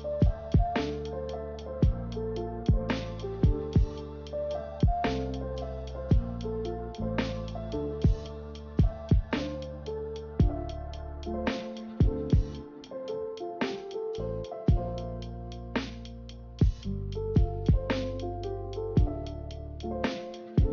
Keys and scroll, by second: 4.8 b, 9.6 Delete, 13.6 a, 16.9 a.